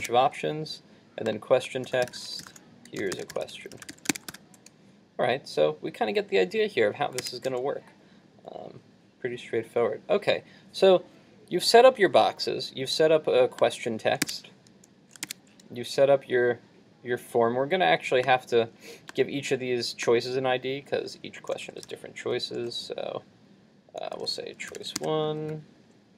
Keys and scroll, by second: 0.0 super+r, 0.1 super+Tab, 3.9 super+s, 4.3 super+r, 7.3 super+Tab, 14.3 super+Tab, 15.3 super+Tab.